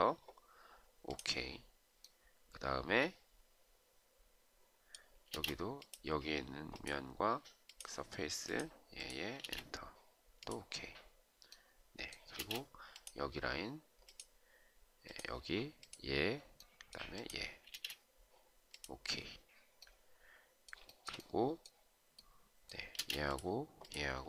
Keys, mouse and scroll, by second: 5.2 space, 9.2 space, 12.3 space, 17.6 space, 20.8 shift+right click, 22.9 space.